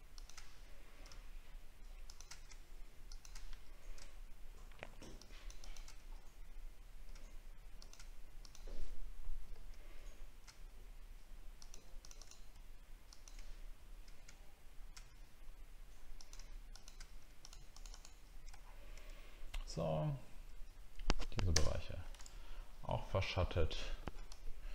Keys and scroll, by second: 18.5 alt+scroll down 1, 21.5 ctrl+BackSpace, 23.1 alt+scroll down 1.